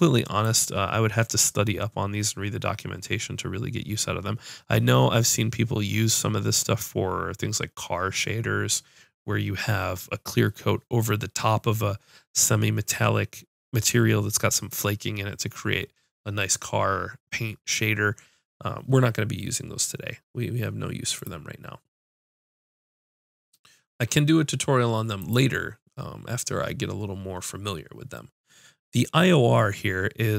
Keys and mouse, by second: 0.4-20.1 drag, 21.2-23.0 drag, 25.2-30.3 drag.